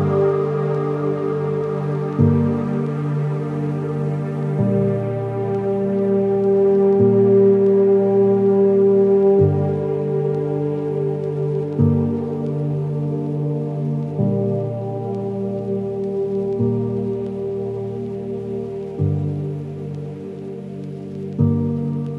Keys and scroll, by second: 12.5 ctrl+-, 12.9 ctrl+-.